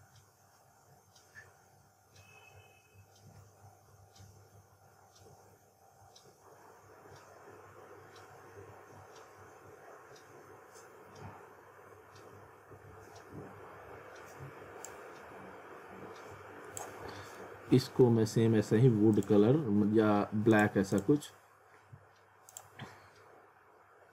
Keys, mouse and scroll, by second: 14.9 click, 17.3 alt+middle click, 19.1 click.